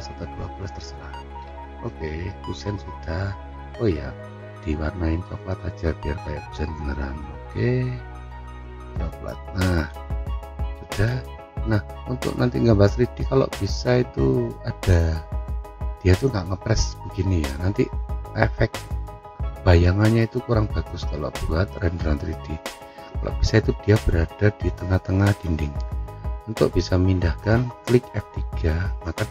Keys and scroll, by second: 28.3 F3.